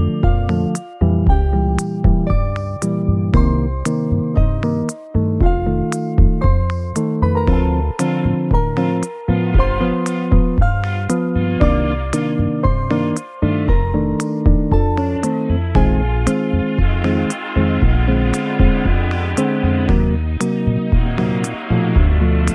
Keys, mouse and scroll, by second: 0.2-0.8 scroll down 1, 1.3-3.7 scroll down 1, 3.7 shift+a, 3.9 shift+a, 11.3 alt+z, 12.2 g, 15.5 g, 16.9-18.8 scroll up 1, 19.0-19.6 scroll up 5, 19.6-21.1 scroll down 11.